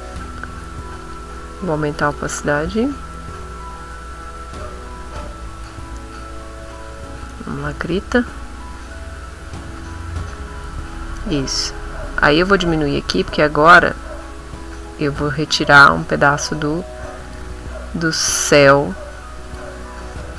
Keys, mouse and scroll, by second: 1.0 click, 1.7 click, 5.0 middle click, 6.7 middle click, 7.1 b, 7.6 middle click, 8.2 middle click, 9.8 click, 10.2 click, 11.4 click, 12.6 click, 17.2 click, 19.4 click.